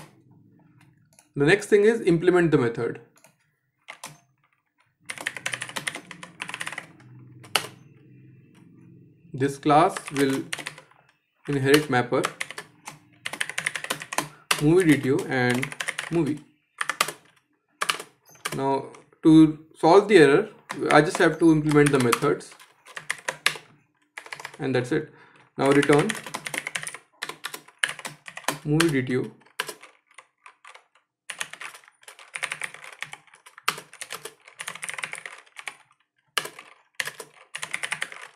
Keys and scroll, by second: 11.3 Return, 17.4 shift+Return, 20.5 ctrl+i, 22.7 shift+Down, 23.5 alt+j, 27.9 Escape, 28.4 Return, 33.3 Return.